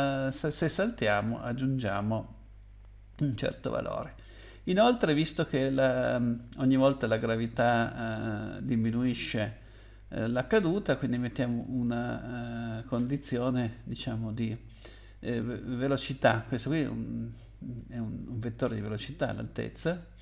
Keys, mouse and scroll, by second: 1.1 click, 1.3 click, 1.5 double click, 7.4 click, 7.8 double click, 13.2 scroll down 2, 16.5 scroll up 2, 17.2 scroll down 1.